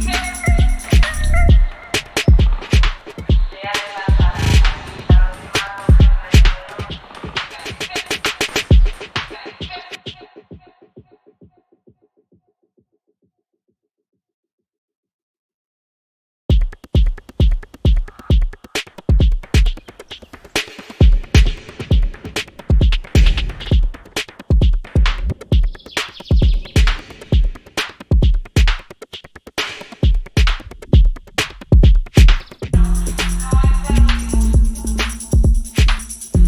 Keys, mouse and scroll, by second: 4.0 click, 4.8 space, 15.5 space, 16.5 click, 17.1 right click, 17.8 click, 18.7-19.7 typing, 20.0 click, 25.7 right click, 26.2 click, 28.7 right click, 30.0 click, 32.9 click, 34.3 click.